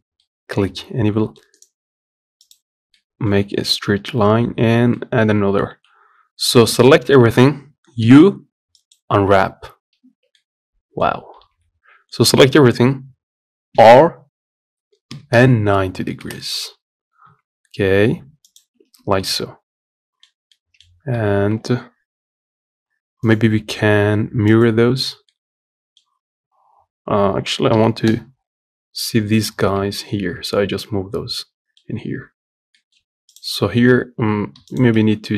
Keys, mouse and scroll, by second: 0.0-1.3 middle drag, 1.3-2.7 right drag, 2.7-3.7 middle drag, 3.7 scroll up 2, 4.7 middle click, 5.4 a, 5.7 scroll down 1, 6.2 middle click, 6.6-7.7 scroll up 1, 8.7 u, 9.8 Tab, 10.1 middle click, 10.8 scroll up 2, 11.1 Tab, 19.0-20.9 middle drag, 20.9 Tab, 24.3 right click, 25.0-27.5 middle drag, 27.5 g, 30.0-30.5 scroll down 1, 30.5-31.8 middle drag, 31.8-32.1 scroll down 1, 32.1-32.5 scroll up 1, 32.5 middle click, 32.7 Tab, 34.4 click.